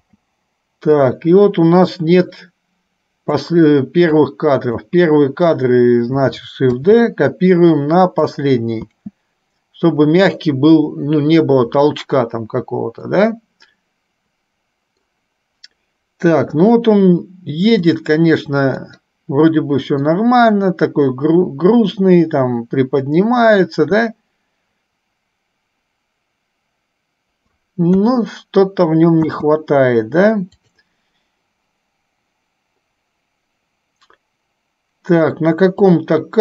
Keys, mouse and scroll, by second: 0.2 space, 1.2-3.7 drag, 4.3 click, 7.1 shift+d, 13.3-15.2 middle drag, 16.4 KP_3, 18.2 click, 19.1-20.3 middle drag, 28.1 KP_3, 29.4 space, 36.2-36.4 drag.